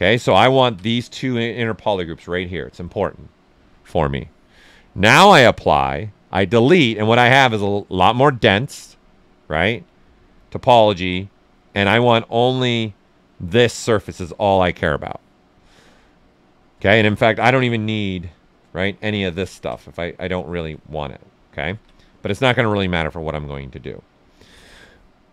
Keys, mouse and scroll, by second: 5.1 ctrl+right click, 9.2 ctrl+right click, 10.6 ctrl+shift+click, 11.3-13.3 ctrl+right drag, 15.5-16.9 drag, 16.9 right click, 17.7-19.2 right drag, 19.2-21.7 ctrl+shift+drag, 21.7 ctrl+z, 21.9-24.0 right drag, 24.2 alt+right click.